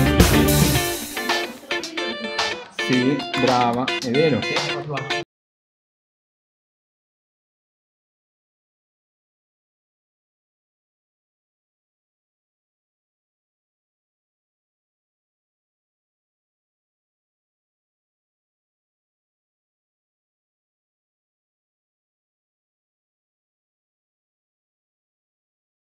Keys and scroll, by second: 2.9-4.1 typing.